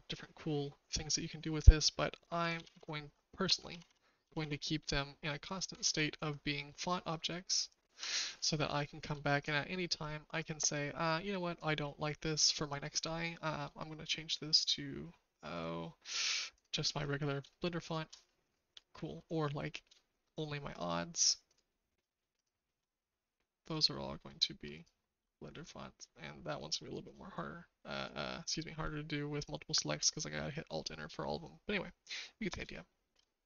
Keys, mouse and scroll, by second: 2.6 ctrl+z, 2.7 ctrl+z, 3.7 ctrl+z, 3.8 ctrl+z, 4.2 ctrl+z, 4.4 ctrl+z, 5.8 ctrl+z, 7.2 shift+middle click, 8.8 shift+middle click, 11.5 click, 15.6-16.7 drag, 17.4-19.2 shift+middle drag, 19.4 middle drag, 19.9 shift+middle click, 23.6 click, 27.0 click, 28.0 click, 32.7 shift+middle click.